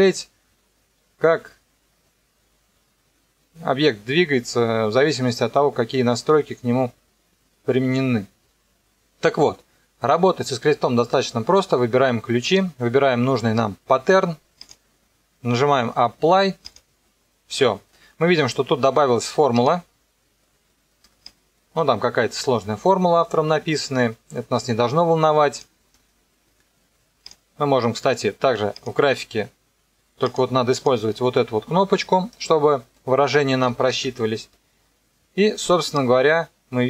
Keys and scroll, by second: 33.6 =.